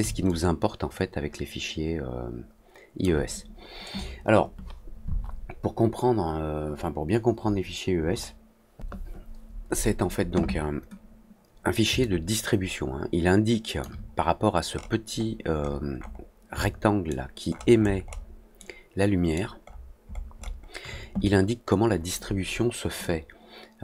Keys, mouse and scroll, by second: 0.2-2.9 alt+drag, 11.9-13.7 alt+drag, 14.6-15.7 scroll up 3, 15.7 middle click, 15.9 middle click, 16.1 scroll down 2, 16.5 alt+middle click, 17.4-18.1 alt+scroll down 5, 17.8 alt+middle click, 18.1 alt+middle click, 18.5 alt+middle click, 19.6-20.6 alt+scroll up 3, 22.9-23.8 alt+drag.